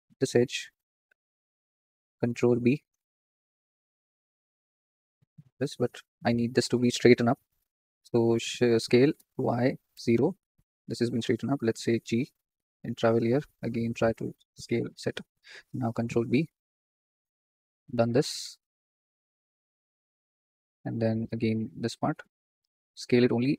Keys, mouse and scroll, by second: 2.4 ctrl+b, 5.7 ctrl+z, 8.2 s, 12.0 g, 14.0 s, 16.0 ctrl+b, 21.2 click, 22.4 s.